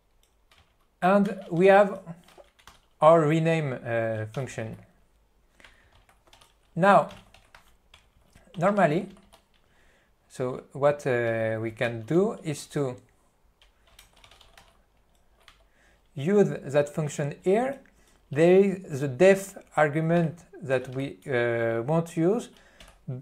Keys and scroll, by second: 0.0-2.1 typing, 2.7 F2, 4.7 n, 6.5-9.3 typing, 11.4 Return, 11.9 ., 15.6 Return, 17.6 ..